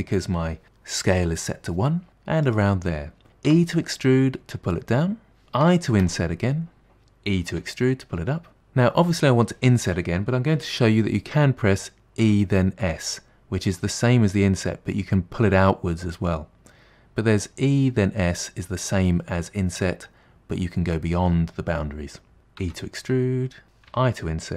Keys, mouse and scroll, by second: 3.6 e, 7.6 e, 12.3 e, 22.7 e, 23.6 middle click.